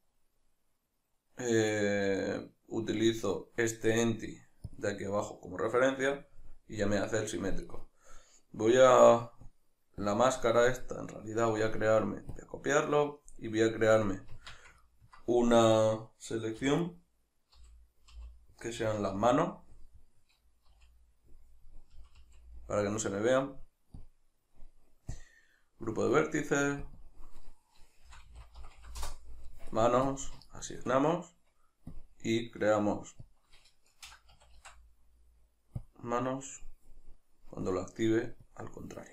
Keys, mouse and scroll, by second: 7.6 right click, 9.4-14.8 drag, 14.3 Tab, 14.8-15.7 ctrl+middle drag, 15.7 right click, 16.6 3, 16.8 right click, 17.6 l, 24.0-39.1 drag, 29.0 Return, 30.7 Tab.